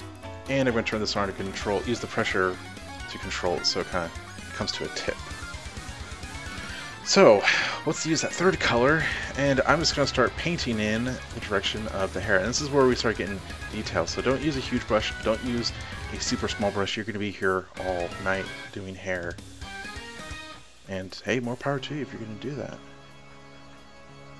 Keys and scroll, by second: 5.5 ctrl+alt+z, 9.5-10.1 typing, 11.4 typing, 13.1 ], 14.6 [, 16.1 ].